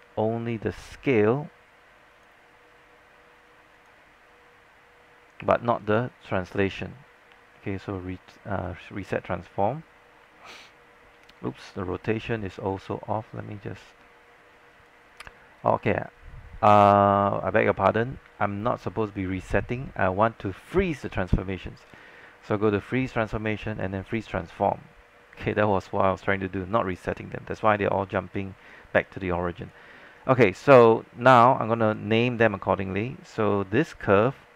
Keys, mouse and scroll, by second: 2.2-10.1 drag, 11.6 z, 14.8 click, 24.3 click, 28.7 alt+click, 30.1 alt+click, 30.1 scroll up 1, 31.0 alt+middle click, 31.5 click, 34.1-34.5 scroll down 1.